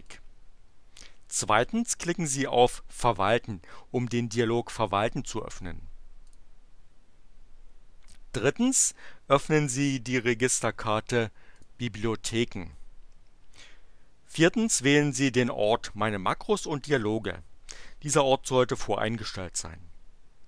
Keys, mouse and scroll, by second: 0.0 click, 6.2 click, 11.4 click.